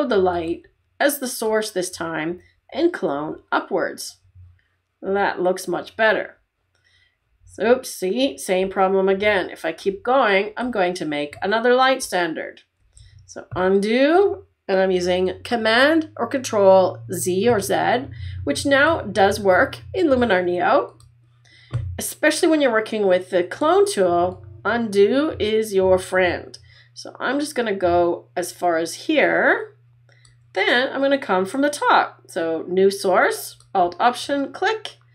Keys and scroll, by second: 13.0 super+z.